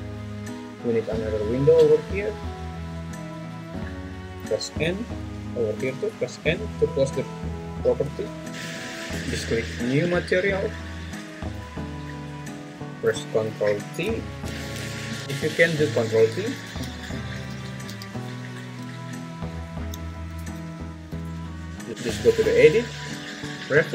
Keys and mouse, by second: 0.9-4.0 drag, 4.8 n, 8.0 n, 8.5 Tab, 12.2 click, 13.1 click, 14.5 ctrl+t, 15.2 `, 16.7 ctrl+z, 19.9 alt+z, 20.6 ctrl+z, 21.9 click, 22.7-23.9 drag.